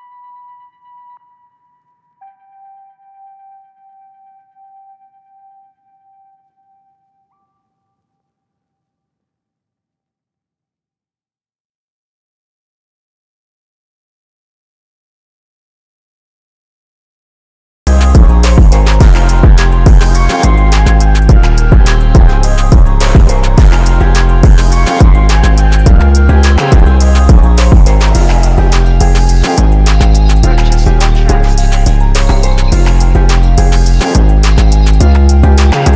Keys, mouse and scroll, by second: 2.5 click, 3.4-3.7 scroll up 1, 3.7 click, 4.8 click, 4.9 ctrl+z, 5.4 click, 5.8 ctrl+z, 6.1 click, 7.4-10.4 drag, 10.4 ctrl+t, 10.7-12.9 drag, 13.6-16.2 drag, 16.2 ctrl+z, 16.4 click, 16.8 ctrl+z, 16.9 click, 17.4 ctrl+z, 17.5-18.9 drag, 19.9 ctrl+t, 20.2-28.2 drag, 28.6 ctrl+z, 28.8 click, 29.0 ctrl+z, 29.3 typing, 29.8 click, 34.6 ctrl+t, 34.9 click.